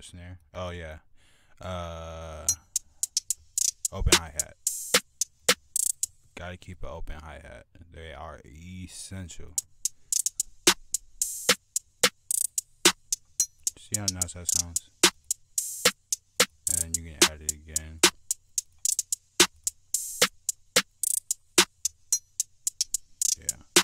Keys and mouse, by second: 7.7-8.3 drag, 23.6 click.